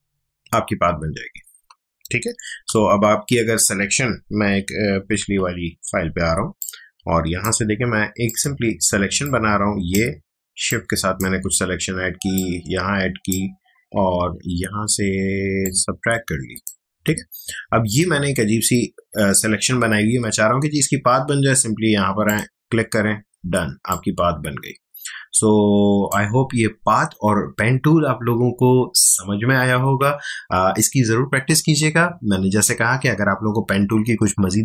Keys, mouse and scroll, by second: 2.0 click, 2.3 ctrl+z, 2.9 ctrl+alt+z, 5.2 ctrl+Tab, 6.3 space, 6.6-10.6 ctrl+drag, 10.6-15.6 shift+drag, 15.6-22.2 alt+drag, 23.4 space, 23.9-27.0 ctrl+drag.